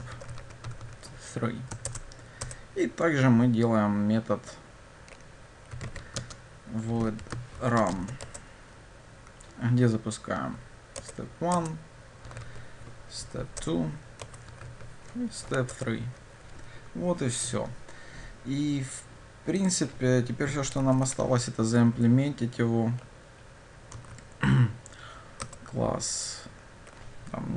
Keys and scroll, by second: 1.9 shift+Return, 11.1 Return, 25.5 Return.